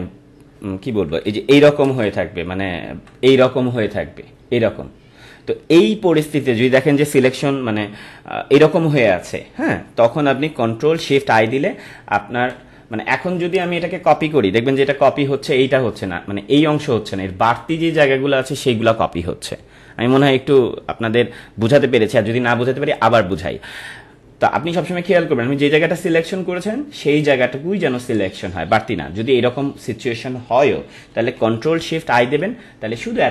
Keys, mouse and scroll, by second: 1.8 ctrl+shift+i, 2.8 ctrl+-, 10.5 ctrl+-, 13.5 click, 32.1 ctrl+shift+i.